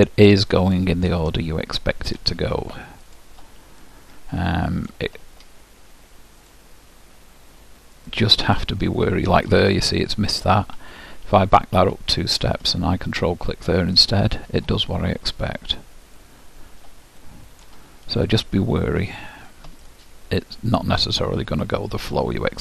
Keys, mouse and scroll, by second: 0.7-5.6 middle drag, 3.4-5.0 drag, 6.6-9.8 drag, 8.7-10.0 middle drag, 11.4 ctrl+z, 12.0 ctrl+z, 13.3-14.9 drag, 14.1-15.9 middle drag, 16.2-18.0 drag, 17.3-21.8 middle drag, 19.4-21.2 drag, 21.8-22.6 drag.